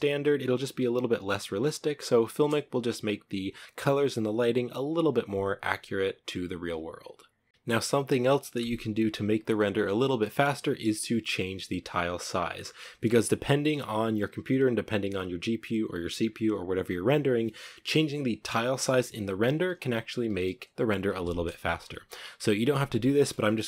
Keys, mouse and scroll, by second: 21.9 z.